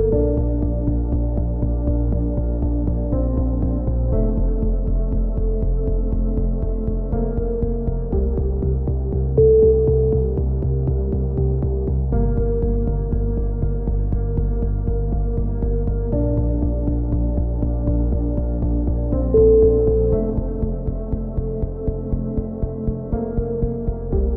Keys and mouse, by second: 1.1 z, 1.5 middle click, 1.8 click, 1.8 right click, 2.0 KP_7, 2.5 click, 3.3 click, 3.7 ctrl+z, 5.2 click, 7.3-8.9 drag, 7.3-9.4 typing, 8.2 right click, 8.6 right click, 9.5 click, 10.1 click, 11.3-13.0 drag, 13.0 Tab, 13.4-14.6 drag, 14.6 KP_1, 14.7 z, 14.8 click, 19.7 z, 19.8 click, 20.5 Tab, 21.0 click, 21.4 middle click, 22.1-24.1 typing.